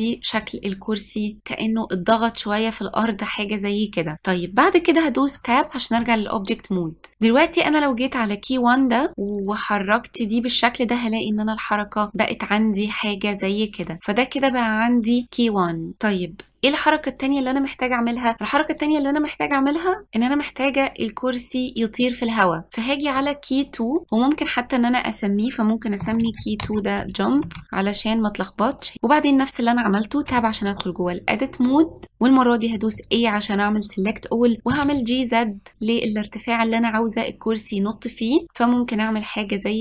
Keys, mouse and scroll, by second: 5.5 Tab, 9.1-11.9 drag, 23.3 click, 24.0 click, 24.1-27.3 drag, 28.8 click, 30.4 Tab, 33.1 a, 34.8 g.